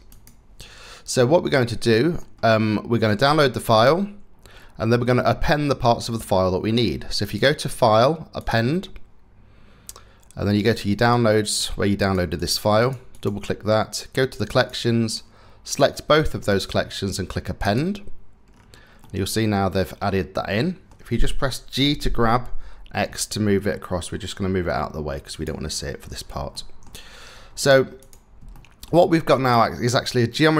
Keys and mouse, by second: 1.3 middle click, 6.9-8.1 middle drag, 18.6-20.5 middle drag, 21.4 g, 26.1 click, 27.6 click, 28.1 shift+drag, 28.3 shift+middle click, 28.3 shift+click, 28.4 shift+middle click.